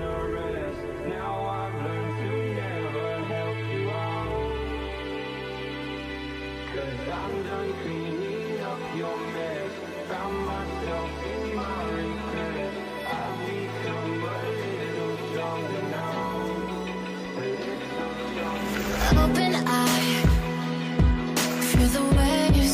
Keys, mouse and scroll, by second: 3.1 alt+Tab, 11.8 v, 12.6 ctrl+t, 14.4 Return, 14.5 v, 18.5 double click, 21.4 alt+click.